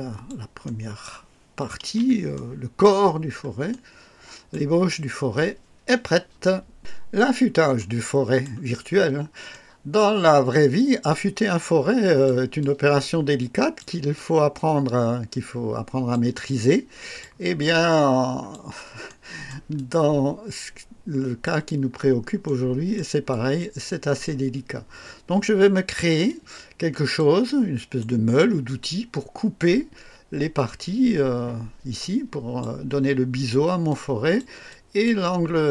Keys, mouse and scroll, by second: 0.6-1.2 right drag, 1.7 KP_1, 2.3-3.0 right drag, 3.0 scroll down 1, 3.7-4.7 right drag, 7.5 scroll up 1, 8.0-8.6 right drag, 8.8-9.3 scroll up 1, 9.5-10.2 right drag, 10.5-12.4 drag, 12.6-14.0 drag, 14.1-16.3 drag, 16.5 click, 17.6 click, 19.1 right click, 19.7-21.6 drag, 21.9-22.3 scroll up 1, 22.4-23.1 right drag, 23.3-26.1 drag, 26.3 click, 27.5-28.2 right drag, 32.0-32.8 drag, 33.9-34.6 drag, 34.7 click.